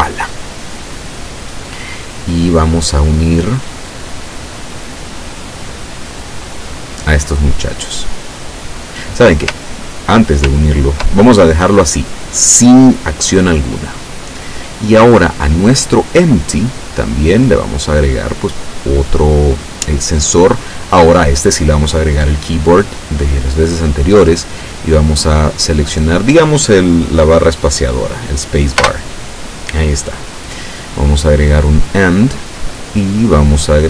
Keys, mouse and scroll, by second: 3.5-4.6 drag, 5.4-6.7 drag, 9.8 ctrl+click, 10.7 ctrl+click, 13.9 click, 15.4 right click, 17.5 click, 18.5 click, 23.0 click, 25.5 click, 28.9 space, 31.3 click, 32.0 click, 33.1 click.